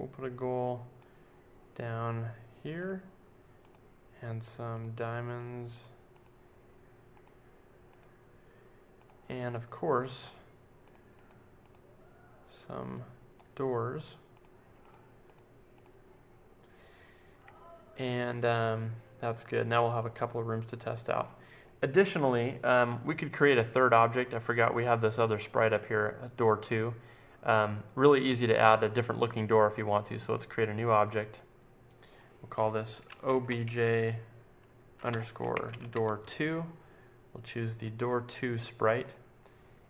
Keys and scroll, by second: 33.0-36.7 typing.